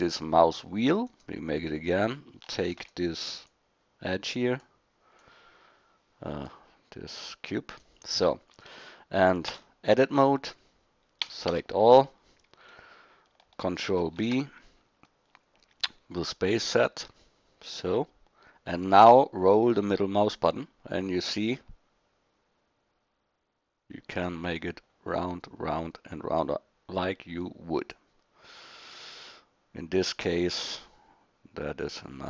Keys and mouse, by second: 2.6 shift+d, 7.8 click, 9.5 Tab, 11.2 a, 11.5 a, 14.0 ctrl+b.